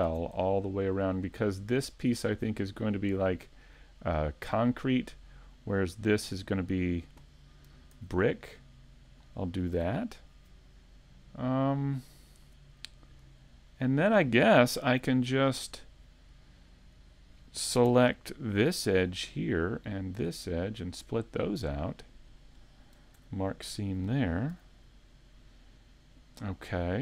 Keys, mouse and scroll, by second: 0.4 middle click, 2.1 alt+shift+right click, 2.6 middle click, 7.9 ctrl+e, 9.8 a, 10.2 middle click, 13.8 middle click, 14.8-15.5 scroll up 2, 15.3 shift+middle click, 18.5 alt+right click, 19.3 middle click, 19.9-20.9 scroll down 1, 20.9 alt+shift+right click, 20.9 scroll down 1, 21.7 middle click, 23.2 ctrl+e, 24.5 a, 25.3 middle click.